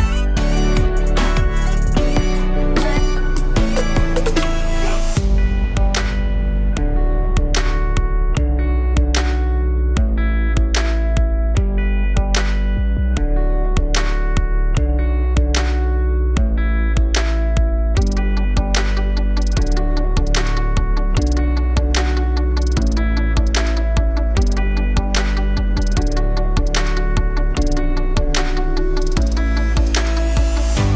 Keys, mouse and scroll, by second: 2.4 Tab, 2.8-3.4 scroll down 3, 3.4 z, 3.8-4.4 alt+drag, 4.4-5.1 scroll down 2, 5.1 click, 5.3-6.1 alt+drag, 6.1-6.4 alt+middle drag, 6.4-7.0 scroll up 3, 7.0 click, 7.4-11.2 alt+drag, 11.6-16.4 alt+drag, 17.6-18.2 alt+drag, 18.2-19.2 alt+middle drag, 19.2 click, 19.5-20.5 alt+drag, 20.7 alt+click, 21.5 s, 23.7-25.0 alt+drag, 25.4 click, 26.1 g, 28.6 click, 28.8-29.2 scroll down 1, 29.2 alt+click, 29.7 scroll down 1, 30.0-30.8 alt+drag.